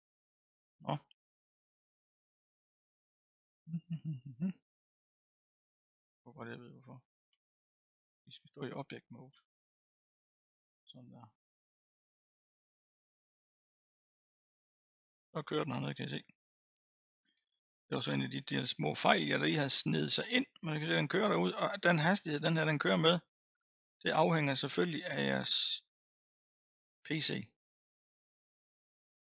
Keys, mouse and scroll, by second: 6.0 Tab, 7.3 Tab, 7.8 Tab, 9.3 a, 13.6-16.6 drag.